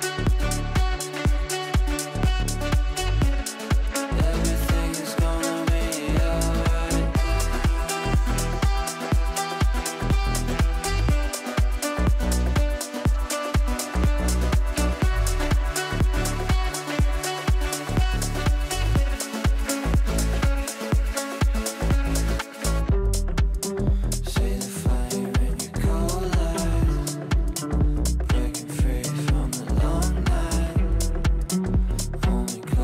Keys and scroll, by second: 11.7 Delete, 28.2 Delete, 31.1 shift+F2, 31.5 F3, 31.8 Escape.